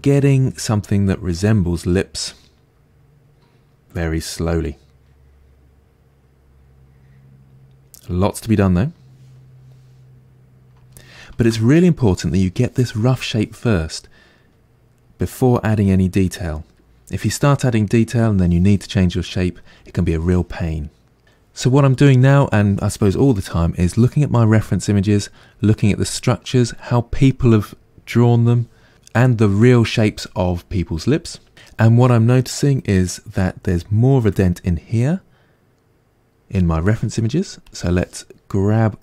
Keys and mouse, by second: 37.7 click, 38.6-39.0 middle drag.